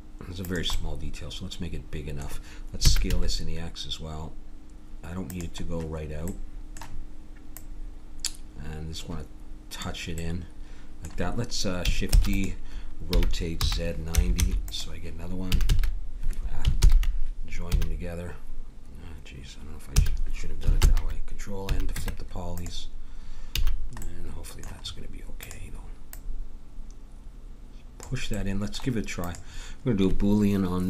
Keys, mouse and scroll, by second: 0.8-2.8 middle drag, 2.8 s, 6.5-7.5 middle drag, 7.5-9.3 drag, 10.2-12.2 middle drag, 12.2 shift+d, 13.1 r, 15.5 a, 15.7 a, 16.8 ctrl+j, 17.7 a, 20.0 a, 20.8 ctrl+n, 21.7 a, 21.9 Tab, 23.6 a, 25.4-28.0 drag, 28.4 middle click, 29.2-30.8 drag.